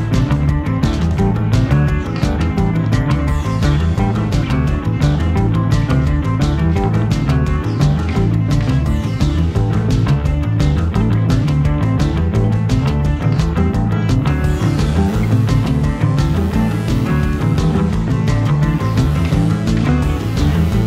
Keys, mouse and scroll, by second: 1.2-12.0 typing, 1.5 scroll up 1, 1.6 shift+middle click, 8.6 middle click, 12.6 Tab, 12.7 middle click, 12.8 Tab, 12.8 scroll down 1, 13.0 click, 13.0 middle click, 13.4 scroll down 1, 13.5 Tab, 13.6-15.3 typing, 13.6 middle click, 13.9 click, 14.2 middle click, 14.6 shift+middle click, 14.6 scroll up 2, 14.7 click, 15.1 middle click, 15.5 middle click, 16.0 middle click, 16.2 Tab, 16.4-16.9 scroll down 3, 16.5 shift+middle click, 16.6-20.4 typing, 16.7 shift+middle click, 17.1 shift+middle click, 17.2 click, 17.6 ctrl+z, 17.7 middle click, 17.8 middle click, 18.3 scroll down 4, 18.3 middle click, 18.5 click, 18.8 scroll up 1, 19.1 shift+middle click, 19.1 Tab, 19.4 click, 19.4 shift+middle click, 19.6 Tab, 20.0 middle click, 20.1 alt+click.